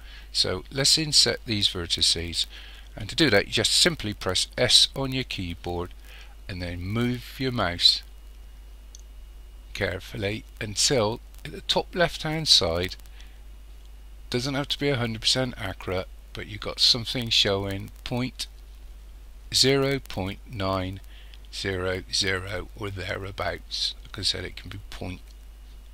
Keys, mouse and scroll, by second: 4.6 s.